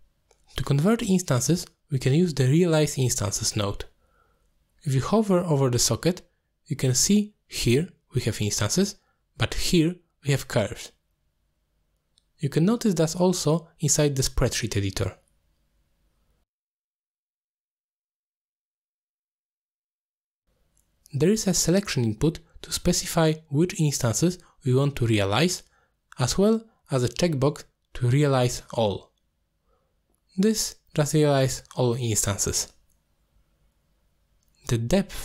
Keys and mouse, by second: 3.8-6.5 drag, 8.8 alt+shift+click, 15.0 click, 16.6 middle click, 16.7 click, 18.7 click, 19.7 alt+shift+click, 22.0 alt+shift+click, 23.6 click, 24.1 click, 24.6 click, 25.0 click.